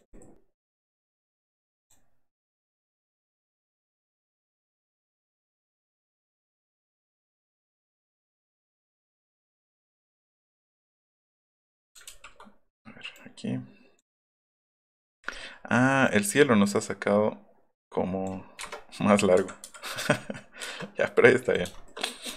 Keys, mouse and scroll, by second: 1.9 click, 2.7 click, 5.4 click, 6.5 click, 8.6 click, 9.2 right click, 10.1 click, 10.4 click, 11.0 click, 12.1 ctrl+z, 13.2 click, 15.2 middle click, 15.4 middle click, 15.5 middle click, 16.1-18.3 drag, 18.6 Return, 21.6 shift+click.